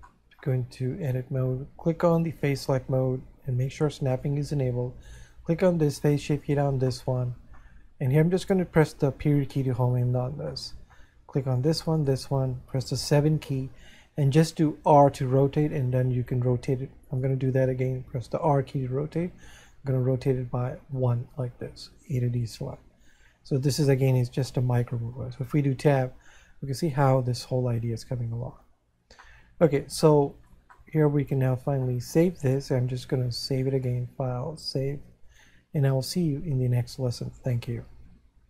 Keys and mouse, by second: 0.3 middle click, 4.1 click, 7.3 middle click, 10.7 middle click, 12.0 shift+right click, 17.1 right click, 24.4 middle click, 26.3 middle click, 31.2 middle click.